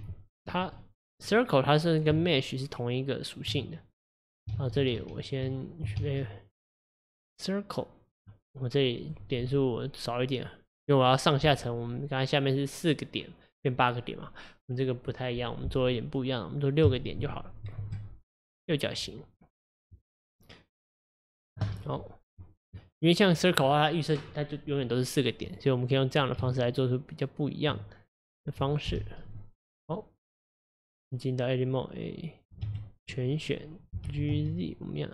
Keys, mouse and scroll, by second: 0.8-2.2 middle drag, 2.2 Tab, 4.6 ctrl+z, 4.8 ctrl+z, 5.0 ctrl+z, 6.0 shift+a, 9.1-12.1 drag, 18.6-19.9 scroll down 2, 19.9-22.7 middle drag, 22.7 click, 25.5 click, 26.4 Tab, 28.9 KP_1, 29.6 click, 33.3 click, 34.1 g.